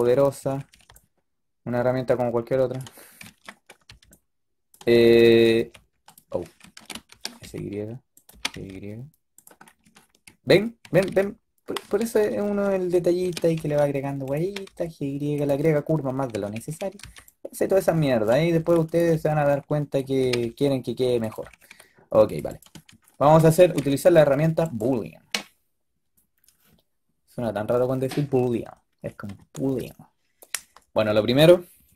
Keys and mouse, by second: 0.0 a, 0.3 a, 0.5 a, 0.6 b, 3.8 b, 5.1 s, 6.7 shift+Tab, 7.0 s, 8.2 g, 10.7 a, 11.0 y, 11.9 ctrl+z, 12.2 ctrl+z, 13.1 s, 14.3 g, 16.2 a, 16.5 a, 16.7 a, 16.9 b, 18.5 g, 19.0 b, 20.1 g, 21.2 a, 21.4 a, 21.6 a, 23.7 z, 24.5-25.2 drag.